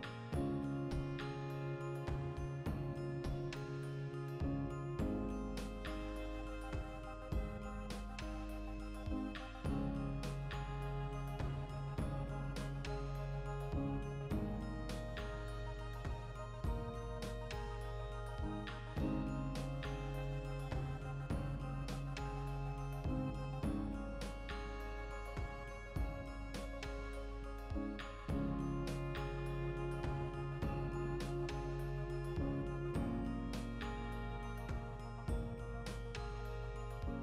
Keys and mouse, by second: 1.1 click, 1.4 right click, 1.7 ctrl+middle click, 2.5-3.7 shift+right drag, 3.7 e, 4.2 click, 5.5 click, 5.5 g, 6.0 right click, 6.3 shift+Tab, 6.6 s, 7.0 Return, 7.4 g, 8.0 ctrl+click, 8.1-11.6 ctrl+shift+middle drag, 8.8 ctrl+r, 11.6 right click, 12.1 shift+right click, 13.1 f, 13.3 right click, 13.4 f, 13.7-15.1 shift+middle drag, 15.1 right click, 15.5 ctrl+z, 15.9 right click, 16.6 shift+middle click, 17.0 e, 17.5 click, 17.7 s, 18.7 Return, 19.6 g, 20.2 ctrl+click, 21.0 ctrl+r, 22.1 right click, 22.6 f, 23.1 shift+middle click, 23.7-25.3 ctrl+right drag, 25.3 e, 25.9 ctrl+click, 26.0 s, 26.4 Return, 26.8 g, 27.2 ctrl+click, 28.1 ctrl+r, 28.9 right click, 29.0 ctrl+middle click, 29.4 right click, 30.1-32.5 ctrl+middle drag, 31.5 ctrl+r, 32.5 right click, 33.0 shift+right click, 33.6 f, 33.7 right click, 33.9 f, 34.5 shift+middle click, 35.2-36.5 right drag, 36.5-37.2 ctrl+shift+middle drag.